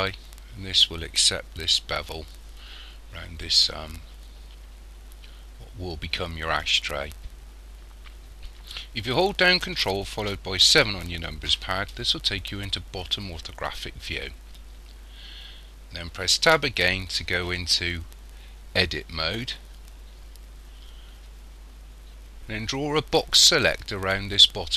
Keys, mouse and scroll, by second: 10.7 ctrl+KP_7, 16.5 Tab.